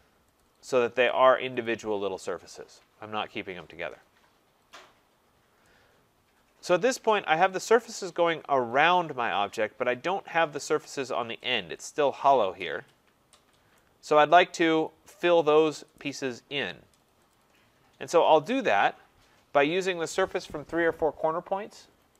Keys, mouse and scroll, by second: 0.4 click, 1.1 click, 1.6 click, 5.2-5.7 scroll, 7.1 right click, 9.7 scroll, 10.6 right click, 11.0-11.4 scroll, 13.8 right click, 15.6 scroll, 16.0 right click, 16.7 scroll, 17.4 click.